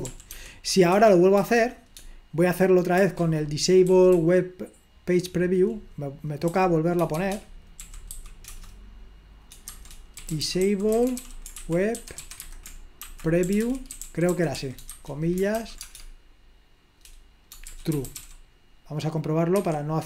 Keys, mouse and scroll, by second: 0.1 ctrl+p, 0.3 ctrl+p, 0.9 Return, 3.0-8.3 typing, 9.8 typing, 11.3 typing, 12.9-18.7 typing.